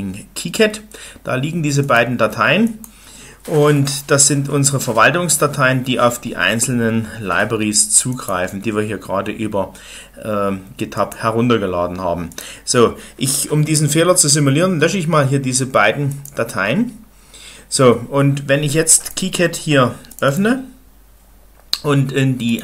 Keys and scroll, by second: 14.6 Delete, 17.0 Delete.